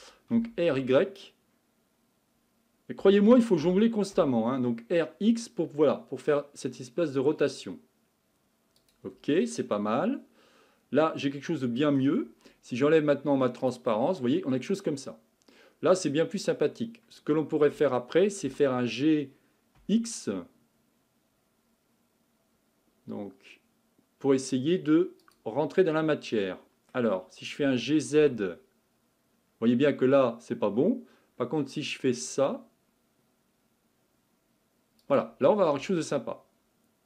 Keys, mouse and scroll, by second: 0.3 r, 3.6 r, 9.9-13.6 middle drag, 13.6 click, 14.2-16.7 middle drag, 16.7-18.4 scroll up 3, 18.4 g, 25.8-27.6 middle drag, 27.6 g, 35.5-36.0 scroll down 3, 36.0-37.0 middle drag.